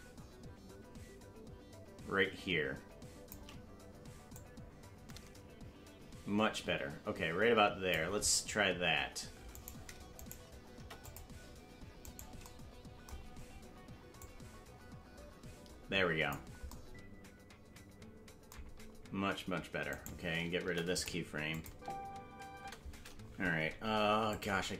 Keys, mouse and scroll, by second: 4.3-7.9 drag, 10.7 Delete, 10.7 right click, 12.2 right click, 14.2-16.3 drag, 19.9 right click, 20.6 Delete, 21.5 click, 21.7 space, 24.3 click, 24.3 space.